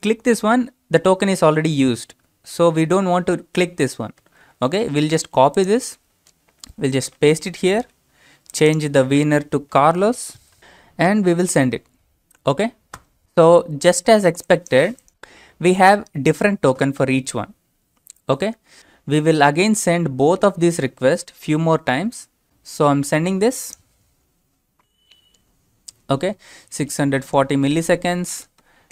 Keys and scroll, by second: 7.0 ctrl+v, 12.9 Return.